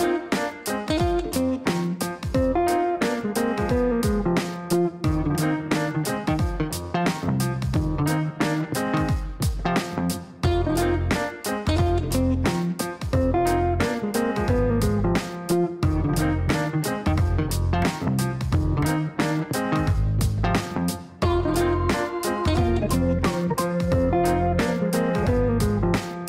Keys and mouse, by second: 1.5 shift+d, 3.5 click, 3.9 click, 4.7 click, 4.8 click, 5.0 click, 6.6 KP_1, 6.7 KP_0, 10.8 KP_Enter, 12.9 click, 13.0 click, 15.0 click, 15.6-17.9 typing.